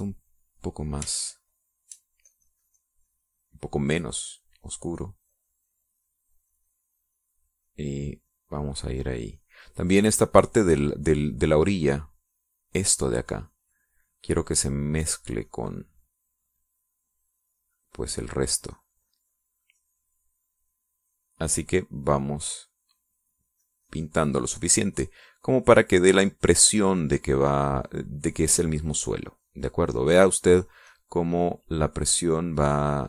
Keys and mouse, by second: 1.3 click, 2.4 shift+click, 3.5-21.5 shift+drag, 24.9-31.5 drag, 31.9-33.0 drag.